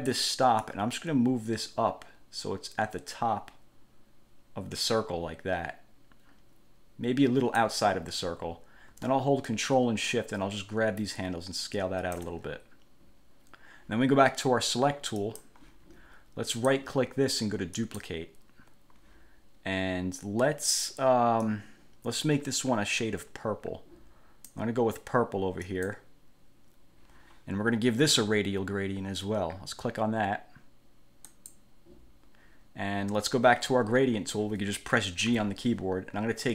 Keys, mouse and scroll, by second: 0.8-7.9 drag, 9.7-12.5 ctrl+shift+drag, 15.3 click, 16.7 right click, 17.9 click, 21.6-24.8 drag, 25.8 click, 31.5 click, 35.5 g.